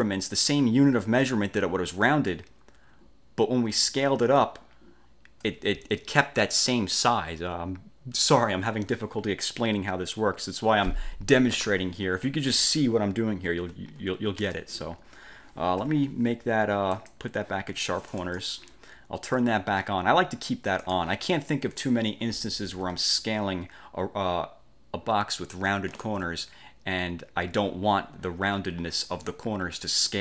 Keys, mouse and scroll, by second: 13.8 F1, 14.6 ctrl+z, 16.0 F4, 17.1 click, 17.8 F1, 18.2 click, 20.9 click, 23.3-26.3 ctrl+shift+drag.